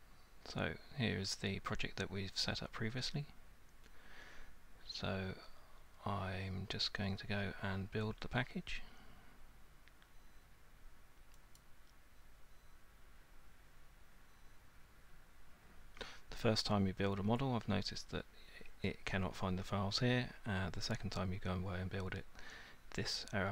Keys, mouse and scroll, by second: 11.6 click.